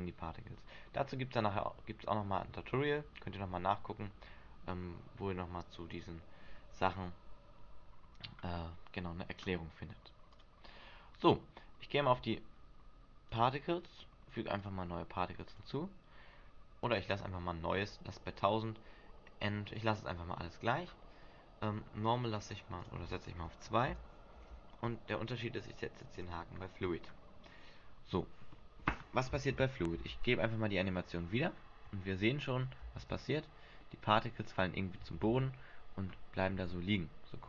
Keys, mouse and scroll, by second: 10.5 click, 13.4 right click, 14.7 click, 15.6 click, 20.6-22.4 scroll down 5, 23.0 click, 26.3 click, 27.0-27.8 scroll down 1, 27.8 scroll down 1, 30.1 alt+a, 31.5-31.9 scroll up 5, 33.1 alt+a, 34.0 middle click, 34.9 shift+middle click, 35.4 alt+a, 36.7 alt+a.